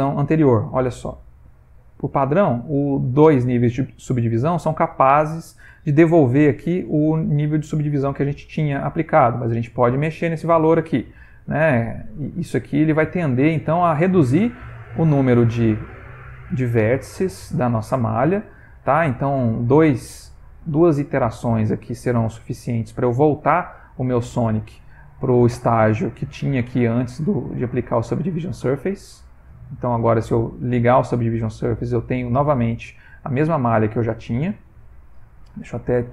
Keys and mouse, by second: 9.5 click, 16.2 middle click, 17.2 ctrl+middle click, 17.8 middle click, 19.2 click, 20.5 middle click, 22.6 middle click, 23.6 middle click, 24.4 Tab, 26.0 click, 32.5 middle click, 34.5 ctrl+middle click.